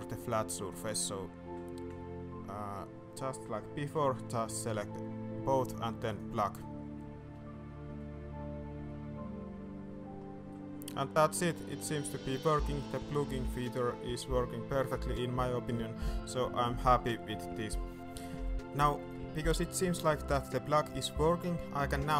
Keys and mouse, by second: 0.6-1.0 shift+middle drag, 3.9 y, 10.5-10.9 middle drag, 11.3 middle drag, 12.0-13.3 middle drag, 16.6-17.1 middle drag, 17.4-17.8 middle drag, 17.9 alt+a, 18.6 middle drag, 19.0 shift+middle drag, 19.4 middle drag, 19.7 shift+middle click, 20.1-20.7 middle drag, 20.9 shift+middle click, 21.3 middle click, 21.8 shift+middle click.